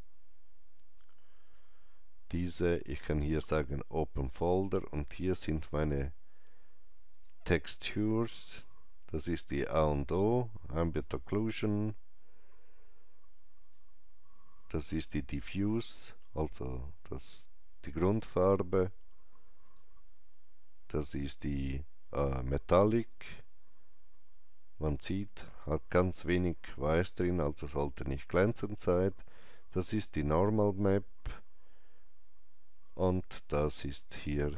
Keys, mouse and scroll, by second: 1.3 click, 7.0 click, 10.0-13.4 drag, 13.5-16.2 drag, 19.5-22.1 drag, 28.4 click, 32.8 click.